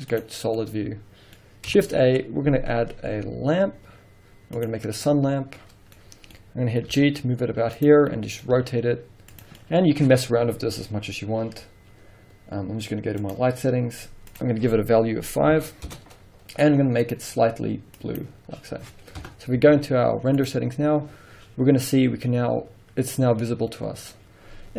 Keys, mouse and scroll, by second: 0.5 scroll down 2, 0.6 middle click, 1.9 shift+a, 5.3-9.5 middle drag, 6.0-6.4 scroll down 2, 6.9 scroll down 2, 7.0 g, 7.9 click, 8.7 r, 9.5 click, 9.7-13.3 middle drag, 10.0-13.3 scroll up 2, 13.3 click, 14.4-17.2 drag, 16.0 Return, 19.3 KP_0, 19.8 z, 21.1 scroll up 1.